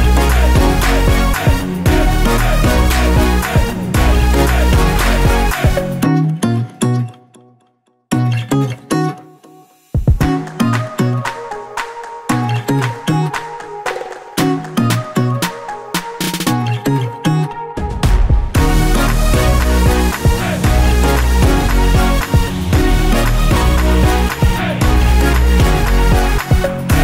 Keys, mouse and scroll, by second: 5.0-6.6 drag, 6.9 click, 10.6-13.4 drag, 10.8-12.6 scroll down 1, 13.4 scroll down 1, 13.8-16.8 middle drag, 14.4-14.7 scroll down 1, 14.7-15.2 scroll up 1, 16.8-19.4 drag, 19.5-20.1 scroll up 1, 20.1-22.0 middle drag, 22.0 click, 22.7-23.8 drag, 23.8 click, 26.8-27.0 middle drag.